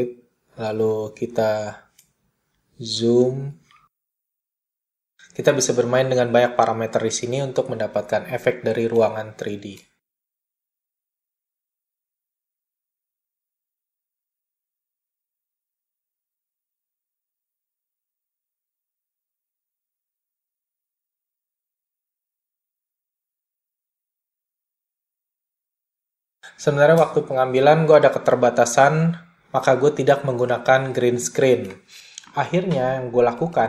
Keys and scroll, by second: 31.0 space.